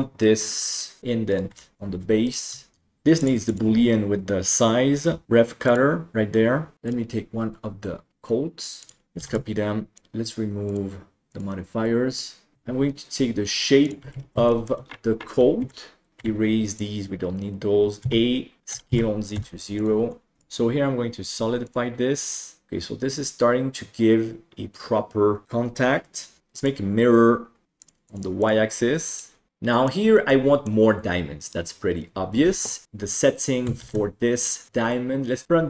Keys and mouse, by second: 0.7 right click, 1.3 right click, 1.5 Delete, 2.2 right click, 3.2 click, 3.5-6.2 drag, 8.8 click, 9.5 shift+d, 11.2 click, 12.1-12.5 middle drag, 12.8 Tab, 14.1 alt+z, 14.4 shift+middle click, 15.6 alt+a, 16.1 ctrl+i, 16.1 Delete, 18.0 a, 18.7 s, 20.2 middle click, 20.4-21.7 drag, 22.7-26.4 middle drag, 26.7-27.6 drag, 27.8 click, 28.1 click, 28.4 click, 29.1 click, 29.5-29.8 middle drag, 30.3-30.6 middle drag, 31.4 right click, 32.8 KP_7, 33.8 shift+s, 35.4 KP_1.